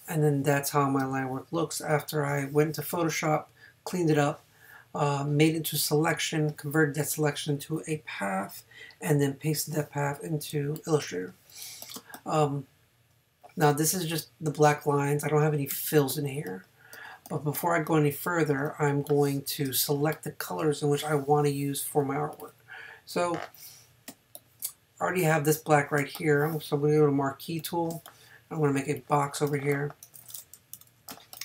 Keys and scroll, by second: 15.7 a, 18.6 space, 19.9 space, 24.1 space, 26.0 space, 27.9 space, 30.7 super+-.